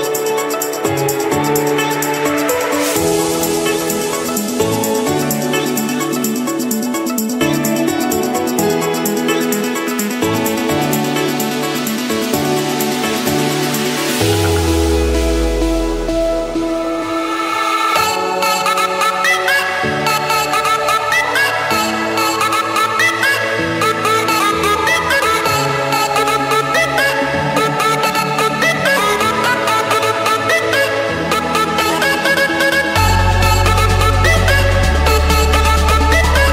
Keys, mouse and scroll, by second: 0.5 click, 0.9 scroll down 2, 3.2 scroll up 4, 4.3 click, 4.8-6.5 scroll, 8.5 click, 10.2 typing, 11.3 Return, 11.7 Return, 12.3 click, 12.9 click, 13.9 Escape, 15.5 click, 15.7 click, 17.2 click, 17.9 click, 18.9 Delete, 20.0 click, 20.6 click, 21.4 click, 21.8 click, 22.7 j, 23.4 Return, 24.3 Escape, 25.7 click, 27.6 click, 27.9-28.7 scroll down 8, 28.8 scroll up 1, 28.9 scroll, 29.2 Escape, 29.7 click, 30.1 click, 31.6-32.4 typing, 33.1 Return, 34.5 typing, 35.0 Return, 35.9 Escape, 36.2-36.5 typing.